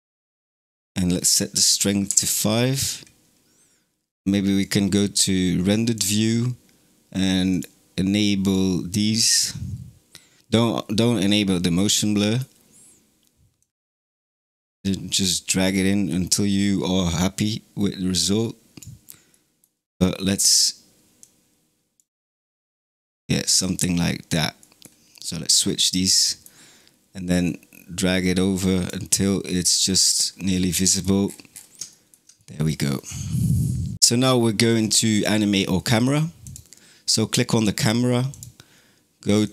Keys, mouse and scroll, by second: 1.0-4.0 drag, 4.5 click, 5.8 click, 7.4 click, 8.3 click, 9.2 click, 11.5-13.4 middle drag, 13.4-16.5 drag, 19.2-21.0 middle drag, 21.0 drag, 24.5-27.3 middle drag, 27.3-29.1 drag, 29.1-30.0 middle drag, 30.0-31.5 scroll down 17, 30.7-31.1 middle drag, 31.8-33.9 shift+middle drag, 34.2-36.3 middle drag, 36.3 click, 38.2 click, 39.3 click.